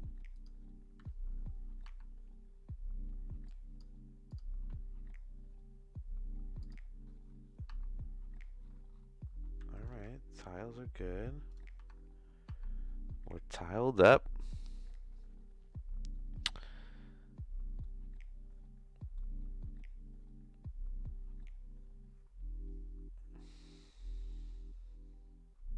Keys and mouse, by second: 1.8 Tab, 3.5 click, 4.3-6.7 drag, 7.8 Tab, 9.7 a, 9.9 s, 11.8 Tab, 12.4 Tab, 17.8-19.1 middle drag.